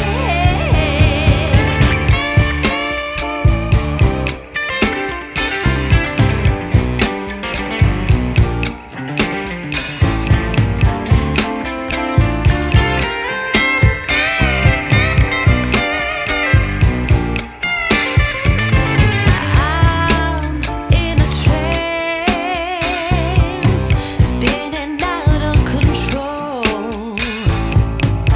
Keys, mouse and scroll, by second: 1.4 click, 8.5 scroll up 1, 8.6 scroll down 2, 8.8 scroll up 1, 8.9-9.4 scroll down 1, 9.8 scroll down 1, 9.9-10.5 scroll up 1, 10.5-11.9 scroll up 1, 14.7 click, 16.6 scroll up 3, 16.9-17.7 scroll down 1, 17.7-18.7 scroll up 1, 18.7 click, 20.0 click, 21.4 click, 24.9 click, 27.2 click.